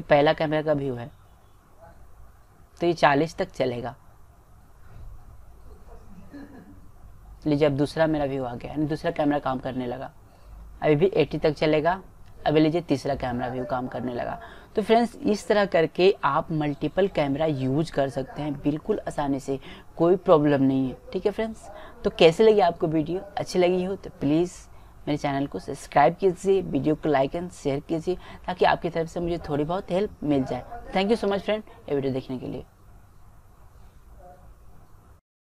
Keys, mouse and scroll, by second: 0.9-2.2 drag, 17.3-18.9 drag.